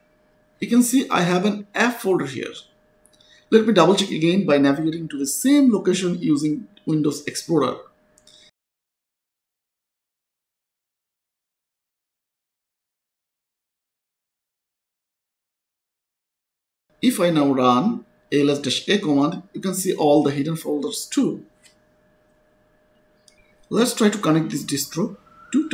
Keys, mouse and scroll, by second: 0.0-0.5 typing, 1.6 click, 3.9 click, 6.3 click, 8.6 click, 10.8 click, 13.7 click, 15.9 click, 16.7-18.5 typing, 18.8 Return, 20.7 click, 23.6 click.